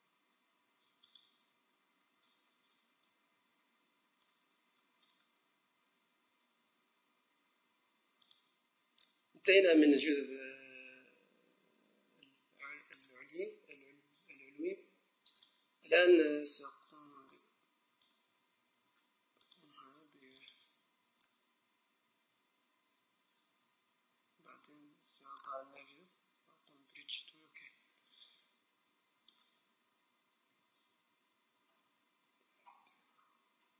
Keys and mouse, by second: 0.0 w, 13.0-14.7 drag, 18.9 middle click, 19.5-21.2 right drag, 20.9 Tab, 28.3-30.5 middle drag, 30.5 KP_0, 31.8 KP_1.